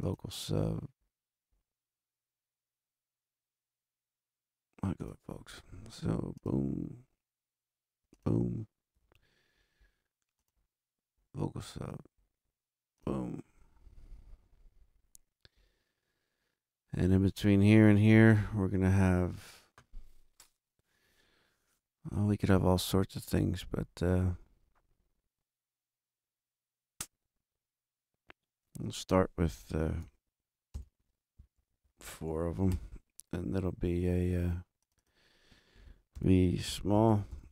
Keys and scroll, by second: 30.7 shift+super+n, 31.5 shift+super+Right, 31.8 super+Down, 32.6 super+4, 32.6 Return, 35.9-37.5 typing.